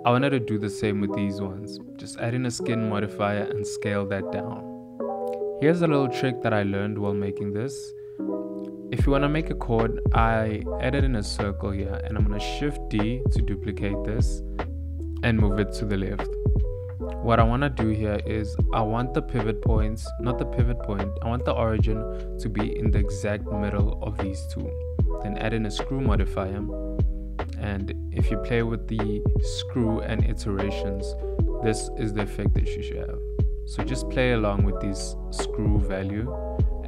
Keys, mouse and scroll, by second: 0.0 click, 0.4 Tab, 0.4 click, 0.6 a, 1.3 click, 1.4 ctrl+a, 1.8 click, 2.0 middle click, 2.2 Tab, 2.2 middle click, 2.9 middle click, 3.2 middle click, 3.2-3.5 scroll up 1, 3.5 Tab, 3.6 ctrl+a, 4.1 Tab, 4.1 click, 4.2-4.7 ctrl+z, 5.0 click, 5.0 g, 8.5 Tab, 9.4 g, 12.0 KP_7, 13.3 shift+d, 15.7 x, 17.3 g, 22.1 Tab, 22.2 middle click, 22.7 click, 26.1 click, 26.5 click, 27.4 click, 28.9 KP_1, 30.1 ctrl+middle click, 30.6 shift+middle click, 31.6 click, 35.5 g, 36.6 s.